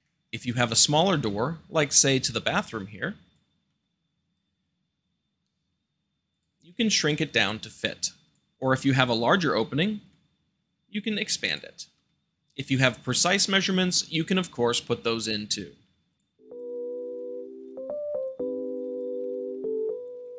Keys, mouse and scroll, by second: 0.0 middle click, 0.5-0.9 drag, 2.0-3.1 middle drag, 3.2 click, 3.6-4.7 middle drag, 3.6 s, 6.2 click, 6.6 g, 6.6 middle click, 7.0 click, 7.3 scroll down 2, 7.7-8.3 shift+middle drag, 8.2-8.9 drag, 10.0-11.0 middle drag, 11.3-11.7 drag, 11.7-12.4 middle drag, 12.6-13.0 drag, 13.0-16.0 middle drag, 16.0 click, 16.2 s, 16.3 middle click, 16.5 click, 17.5 shift+d, 17.6 click, 17.8 shift+middle click, 18.3 click, 18.6 drag, 19.6 shift+d, 19.7 click, 19.7 r, 20.3 click, 20.3 g.